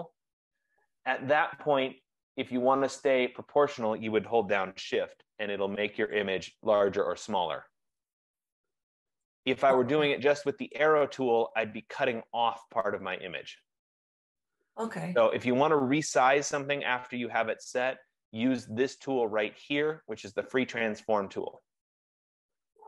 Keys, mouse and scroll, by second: 6.1 shift+click, 9.3 click, 10.9 click, 16.5 ctrl+z, 21.7 click.